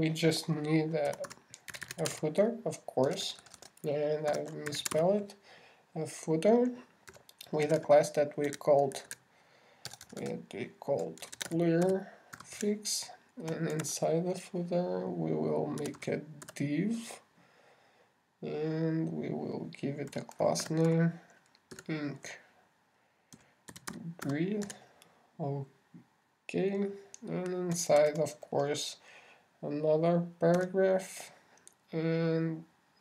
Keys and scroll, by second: 14.9 shift+x, 15.2 shift+<, 29.4 shift+<.